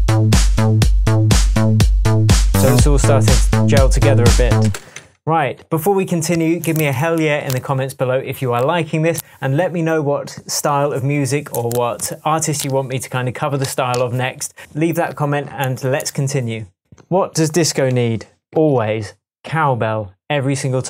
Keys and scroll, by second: 4.7 super+space, 5.0 Tab, 16.8 shift+Tab, 17.9 Tab, 18.4 super+Tab, 18.6 super+s.